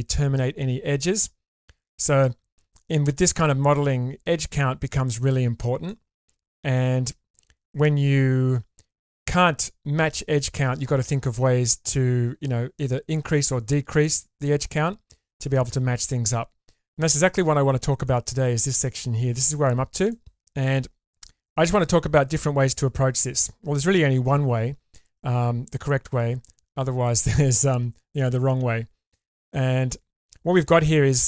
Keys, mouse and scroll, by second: 1.0-1.5 scroll down 1, 1.5 middle click, 1.5 scroll down 1, 3.2-4.6 middle drag, 5.8 shift+middle click, 7.5-9.0 scroll up 2, 17.6-18.0 scroll up 4, 18.0 middle click, 20.1 middle click, 20.4-21.2 scroll up 1, 28.6 scroll down 1, 29.2-30.2 middle drag, 30.6 middle click.